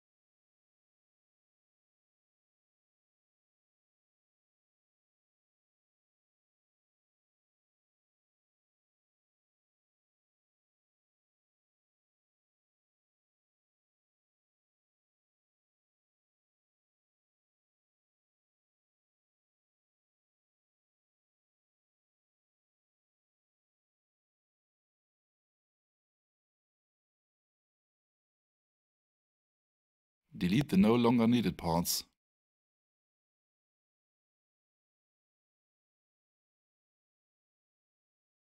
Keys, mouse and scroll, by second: 3.3 click, 8.6 click, 11.5 ctrl+c, 12.7 right click, 15.9 click, 21.3 alt+click, 29.7 Return, 31.3 click, 37.5 Return.